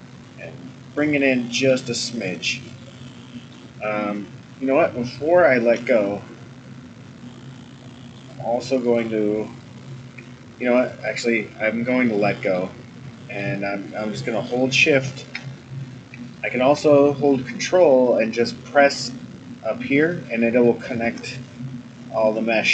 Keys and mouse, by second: 0.9 middle click, 2.8 middle click, 5.7 ctrl+z, 7.2-8.2 middle drag, 10.6 click, 12.1 middle click, 13.1 middle click, 13.9 middle click, 16.3 shift+click.